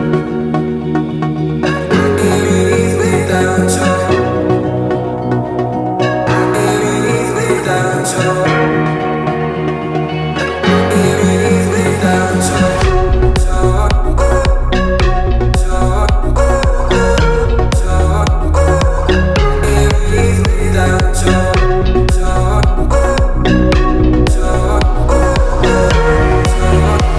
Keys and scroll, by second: 6.0 alt+i, 6.5 g, 8.3 9, 9.7 ctrl+s, 12.9 ctrl+s, 13.1 ctrl+w, 20.7-26.3 typing.